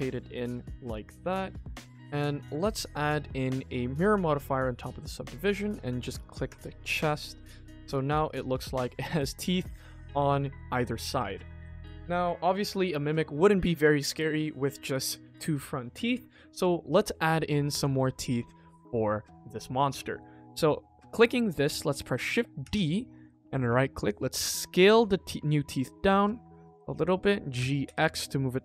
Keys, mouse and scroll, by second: 0.1-0.7 scroll up 3, 0.6 click, 1.1 middle drag, 1.4 scroll down 2, 1.7 shift+middle drag, 2.4 ctrl+s, 2.7 click, 4.1-4.5 drag, 5.5 click, 6.4 click, 6.9 KP_1, 7.5 shift+middle click, 8.1 ctrl+5, 8.5 shift+middle click, 10.7 middle drag, 16.7-17.2 scroll up 1, 17.4 shift+middle drag, 17.8 ctrl+s, 18.4 KP_1, 18.9 shift+middle click, 19.4 click, 20.4-20.7 middle drag, 21.2 click, 22.6 shift+d, 24.4 s.